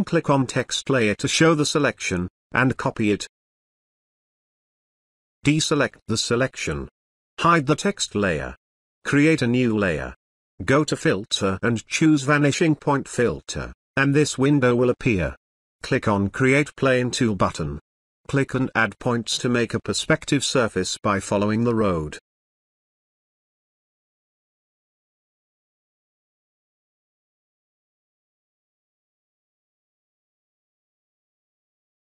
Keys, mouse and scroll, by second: 0.0 ctrl+click, 2.2 click, 16.5-18.1 drag, 23.0 click, 29.6 click.